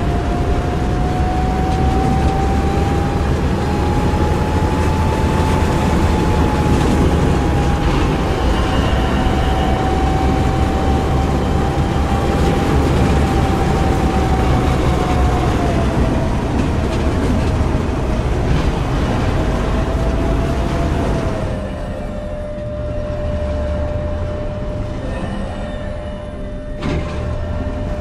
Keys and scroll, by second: 2.6 w, 4.8 a, 7.6 e, 11.9 a, 15.4 s, 16.0 w, 16.8 d, 17.9 a, 18.3 q, 20.4 w, 20.8 s, 22.4 w, 24.9 s, 26.0 q, 26.6 w.